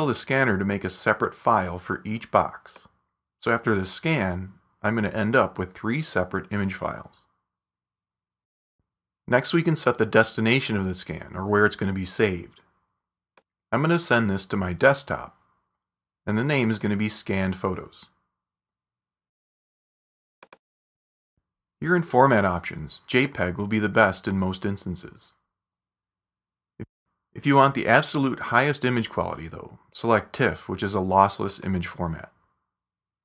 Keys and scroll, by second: 17.3-19.5 typing.